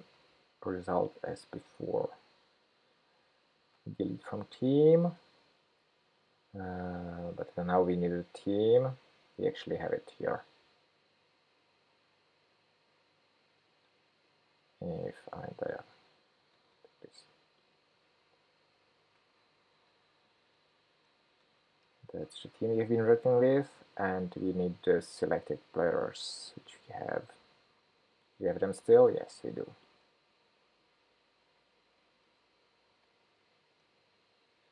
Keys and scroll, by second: 0.3 shift+super+p, 0.3 super+c, 3.7 super+v, 16.7 ctrl+shift+k, 19.0 super+v, 27.4 super+c, 33.0 super+v.